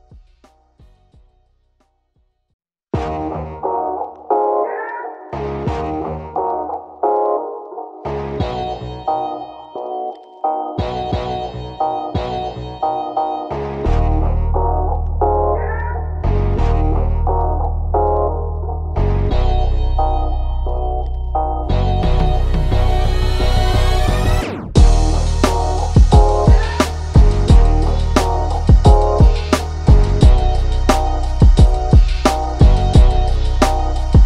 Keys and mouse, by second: 4.1 click, 5.8 click, 11.1 ctrl+-, 12.2 click, 13.2 click, 13.8 right click, 14.3-15.9 drag, 16.3 click, 19.2 click, 20.8 click, 21.9 click, 25.9-31.1 drag, 34.0 click.